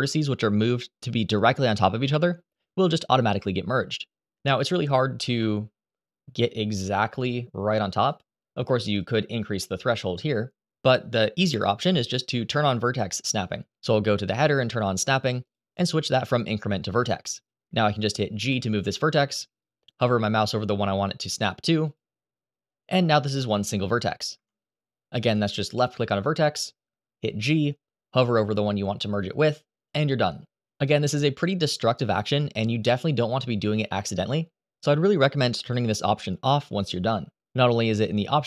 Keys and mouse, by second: 5.0 g, 8.8-10.1 drag, 14.8 click, 15.2-17.1 drag, 18.2 g, 21.6 click, 22.8 g, 24.1 Escape, 25.5 click, 26.9 g, 32.3 click, 32.6 g, 38.3 click.